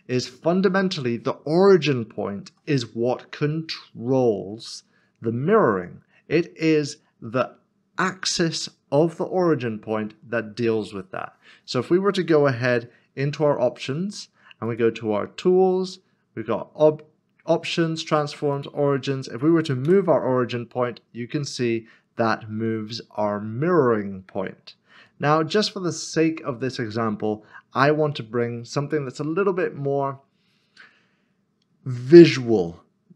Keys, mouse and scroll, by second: 6.2 ctrl+z, 6.4 scroll up 1, 9.8 scroll down 1, 12.7 n, 14.7 click, 18.5 click, 19.9 g.